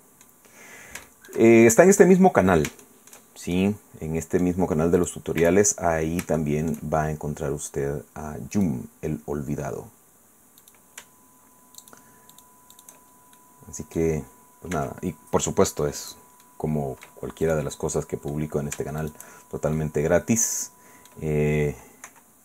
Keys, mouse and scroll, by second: 0.4-0.9 scroll down 1, 1.0 shift+middle click, 2.1-3.3 middle drag, 3.5-4.6 shift+middle drag, 5.0 click, 5.4 Tab, 6.4 shift+click, 8.5 right click, 9.3-10.6 scroll up 2, 10.6 right click, 11.8 shift+right click, 13.4-14.6 shift+middle drag, 14.7 e, 16.0 click, 16.4 click, 17.4 click, 17.7 click, 19.0 shift+middle click, 19.7-21.3 middle drag, 22.1 i.